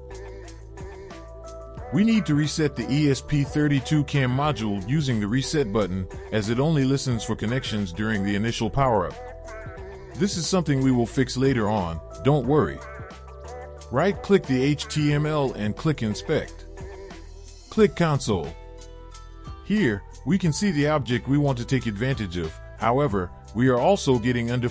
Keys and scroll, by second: 0.6 Return.